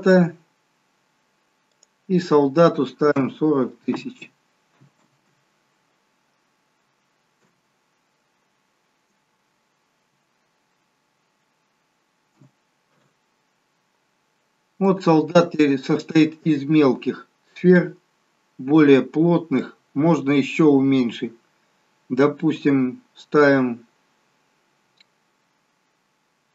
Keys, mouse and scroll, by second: 4.7 0, 15.5 middle click, 16.9-17.9 scroll up 6, 18.4 middle click, 20.3-20.9 scroll down 4, 21.2 scroll down 2.